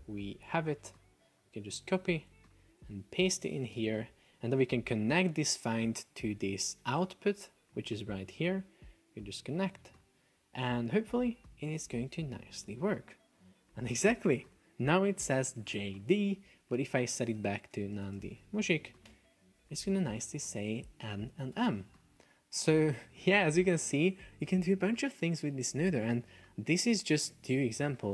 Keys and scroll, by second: 2.0 F1, 3.5 super+v, 3.8 Return, 17.8 shift+n, 18.2 space, 18.4 shift+m, 19.2 Return, 21.8 super+p, 22.9 Escape, 26.5 super+Tab, 26.9 super+Escape.